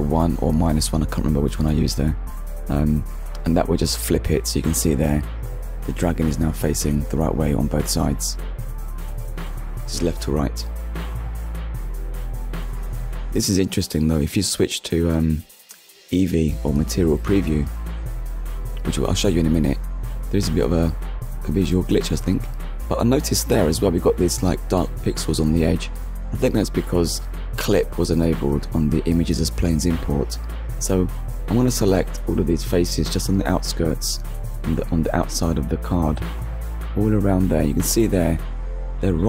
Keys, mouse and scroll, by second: 0.6 middle click, 1.5-1.8 scroll up 1, 2.0 KP_1, 3.1 ctrl+KP_1, 4.0 ctrl+KP_1, 5.2 KP_1, 7.4 click, 9.0 Tab, 9.8 Tab, 10.0 click, 10.4 middle click, 11.6 shift+middle click, 13.5 ctrl+s, 16.6 middle click, 18.4 scroll up 1, 19.3 middle click, 20.6 middle click, 24.2 middle click, 24.9 click, 25.7 Tab, 27.0 click, 28.3 middle click, 29.0-29.4 scroll up 1, 29.8 KP_Decimal, 30.5-30.9 scroll up 1, 31.0 click, 31.8 middle click, 32.4 scroll up 1, 34.2 click, 35.7 alt+click, 37.8-38.5 scroll up 2.